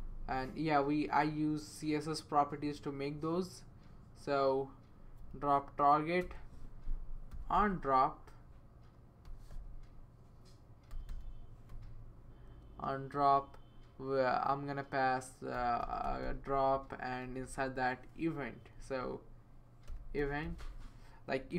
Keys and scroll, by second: 6.2-11.9 typing, 11.7 Return, 15.3-21.1 typing, 18.5 Left, 21.4 Right.